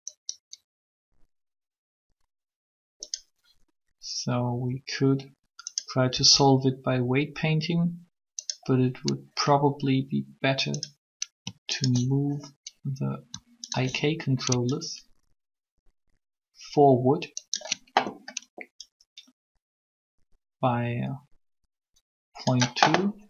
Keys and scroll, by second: 6.1 r.